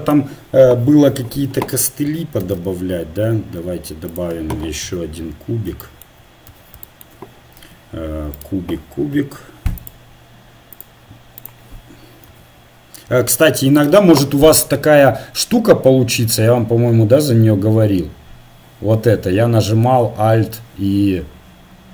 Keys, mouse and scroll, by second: 2.4 shift+a, 4.8 KP_1, 6.5 z, 7.6 s, 10.9-13.2 drag, 12.3 s.